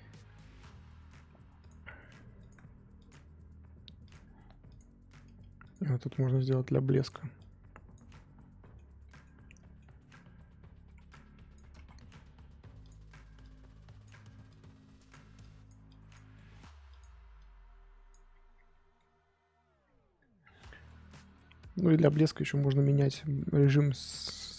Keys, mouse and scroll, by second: 1.6 click, 2.4-4.6 drag, 5.6 click, 6.3 middle click, 6.8-8.6 drag, 8.6-10.3 middle drag, 10.3-10.8 scroll up 1, 11.1 click, 11.8 ctrl+z, 12.8 click, 13.4-16.3 drag, 16.3 middle click, 16.9-18.3 drag, 18.3-18.7 scroll down 7, 18.7-19.8 middle drag, 19.8-20.1 scroll down 1, 20.1-21.5 scroll up 8, 22.0 middle click, 22.2-23.9 scroll up 3.